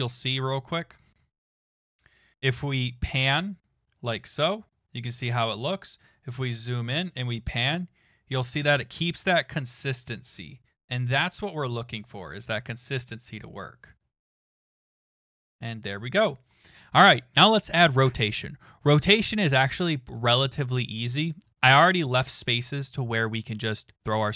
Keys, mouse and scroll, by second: 21.9 click, 22.6-23.2 scroll down 5, 23.3-24.3 scroll up 5.